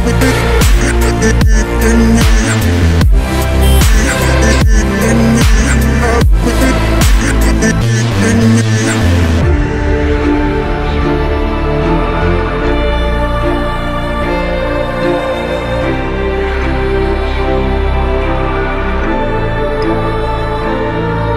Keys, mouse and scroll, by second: 8.9-9.6 alt+scroll down 1, 17.5 alt+scroll down 2, 19.2-19.6 alt+scroll up 1.